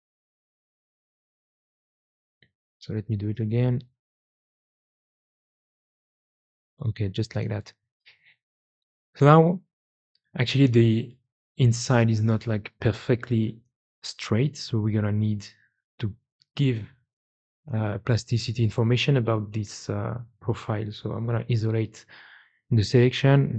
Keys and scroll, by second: 1.2 g, 1.7 Escape, 3.7 g, 15.6 2.